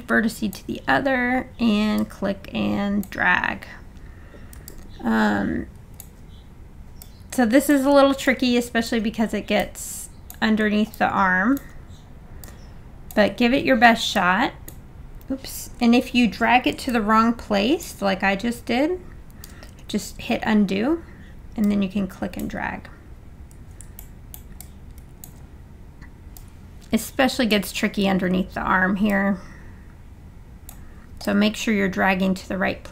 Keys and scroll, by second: 19.9 super+z.